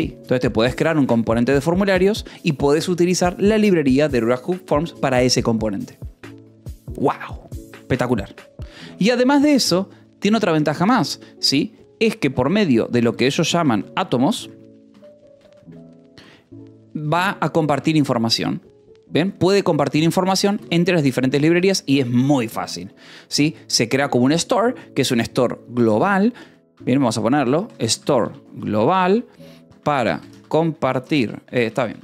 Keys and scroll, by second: 7.9-9.1 typing, 11.5 space, 12.4 t, 13.1 BackSpace, 15.0-16.3 typing, 17.6 Escape, 19.0-22.1 typing, 19.6 Escape, 20.9 Escape, 26.2-32.0 typing.